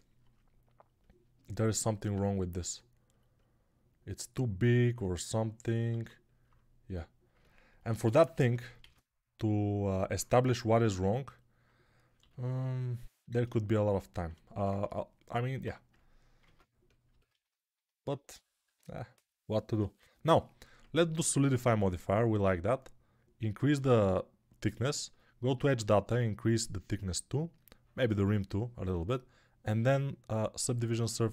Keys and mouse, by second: 5.9 alt+q, 7.8 Tab, 8.7 shift+d, 9.7-11.3 alt+middle drag, 12.1 g, 13.0-19.9 alt+middle drag, 16.3 ctrl+Tab, 18.5 Tab, 19.9-31.3 drag.